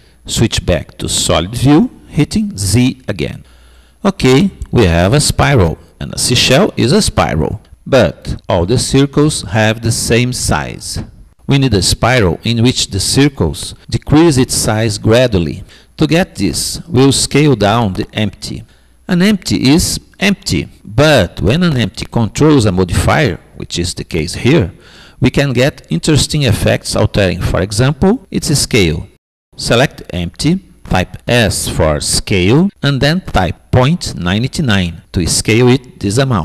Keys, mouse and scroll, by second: 0.4 z, 0.9-3.4 middle drag, 5.8-7.6 middle drag, 12.4 typing, 22.3-24.3 middle drag, 22.7 typing, 25.3-26.3 typing, 31.0-32.8 drag, 33.3 s.